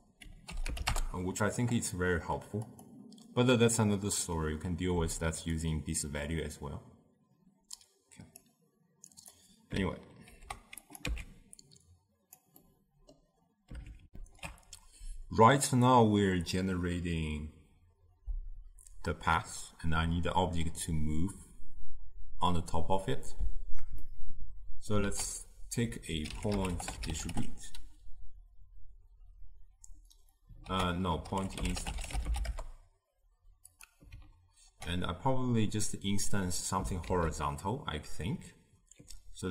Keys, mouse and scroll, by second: 10.4 ctrl+h, 11.2 x.